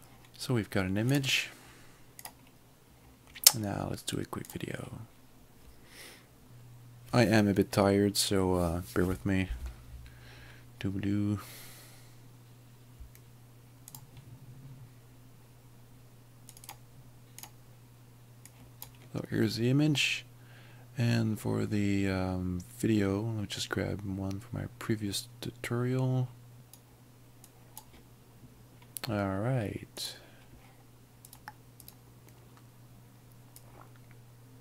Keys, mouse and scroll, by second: 1.2 click, 4.5 click, 6.5 double click, 13.9 click, 16.6 click, 18.6 click, 26.6 click, 27.6 click, 30.1 click, 33.6 l, 33.7 click.